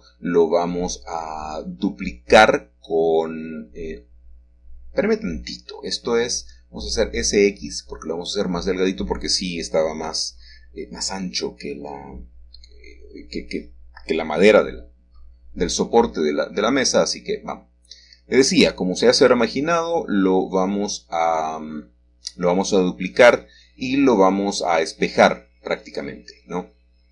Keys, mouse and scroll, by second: 0.5-2.2 scroll down 1, 4.5 shift+middle click, 5.2 shift+middle click, 6.2 shift+middle click, 7.0-8.2 shift+middle drag, 12.4 click, 12.8-14.1 scroll down 1, 13.2-15.5 middle drag, 14.3 Tab, 14.7-16.2 scroll up 1, 16.2-17.2 shift+middle drag, 17.4 click, 18.0-19.2 scroll down 1, 19.2-21.4 shift+middle drag, 19.5-21.3 scroll down 1, 21.3 scroll down 1, 21.8 ctrl+shift+s, 22.4 KP_Add, 23.0 Return, 24.3-27.1 scroll up 1.